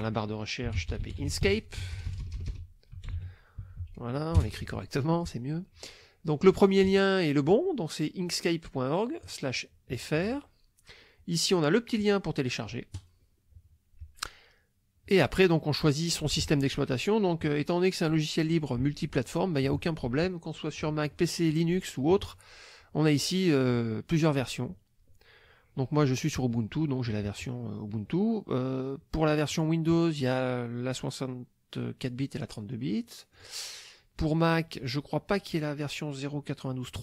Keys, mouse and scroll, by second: 0.4-4.3 typing, 4.4 Return, 9.2 click, 12.9 click, 29.5 click, 33.3 click, 34.5 click.